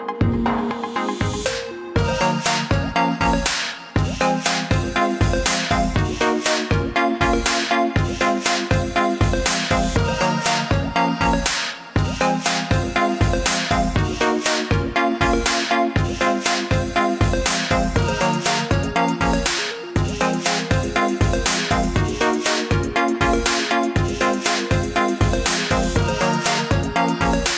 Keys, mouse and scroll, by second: 0.0 click, 9.5 click, 13.8 click.